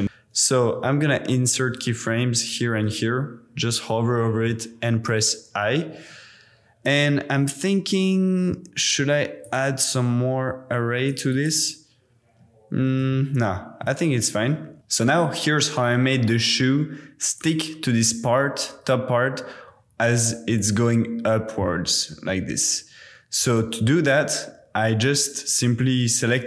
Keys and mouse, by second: 1.7 i, 2.9 i, 11.1 click, 11.3 click, 13.3 super+z, 14.6 super+z, 17.3-17.9 drag, 20.6-23.4 drag.